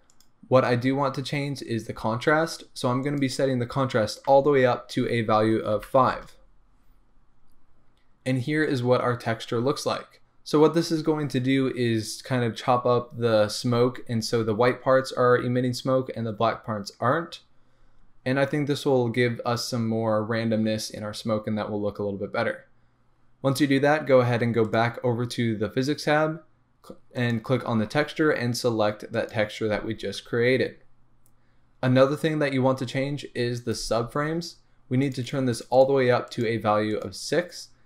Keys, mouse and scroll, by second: 0.5-1.5 scroll down 1, 3.0-24.7 drag, 6.2 Return, 27.1-37.5 drag.